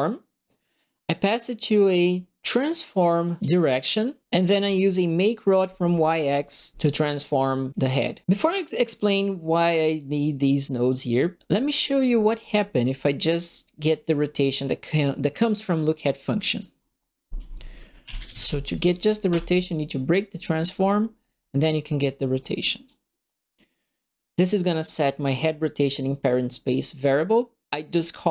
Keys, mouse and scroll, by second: 0.4 right click, 1.8 middle click, 2.6 right click, 9.7-10.8 drag, 11.3 click, 16.2 click, 17.7-18.9 typing, 19.2 Return, 21.5-22.8 drag, 28.0 click.